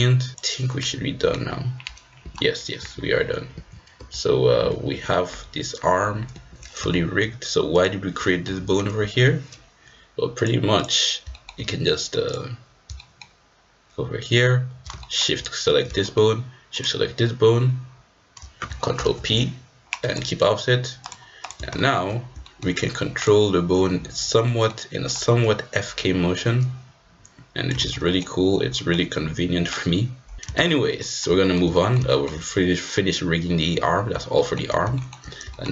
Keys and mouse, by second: 0.3-1.3 drag, 1.4 g, 2.8 g, 4.0 r, 5.9 g, 6.9 shift+middle drag, 7.7-8.4 drag, 8.6 r, 10.3-10.9 drag, 11.3 shift+click, 13.0 shift+middle click, 15.1 shift+middle click, 16.0 shift+middle click, 16.7 shift+click, 18.9 ctrl+p, 21.1 click, 21.7 shift+middle drag, 22.4 shift+middle click, 23.1-24.2 drag, 24.4 middle click, 25.2-28.0 drag, 27.9 ctrl+z, 28.1 middle click, 28.7 middle drag, 29.6 click, 30.4 ctrl+z, 30.7 ctrl+z, 31.0 middle click, 31.4 shift+middle drag, 31.7 middle drag, 32.1 shift+middle drag, 34.3 shift+middle click, 34.9 shift+middle drag, 35.5 shift+middle drag.